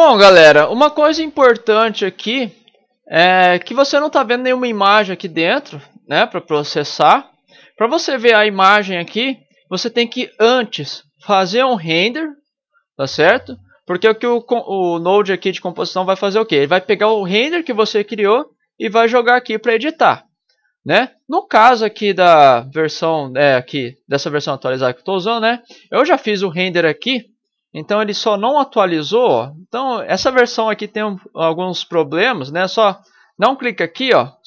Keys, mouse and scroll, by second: 26.0 ctrl+Right, 28.0 ctrl+Left, 29.3 ctrl+Left, 29.9 ctrl+Left, 31.9 ctrl+Left, 32.7 ctrl+Left, 33.5 ctrl+Left, 34.1 ctrl+Left.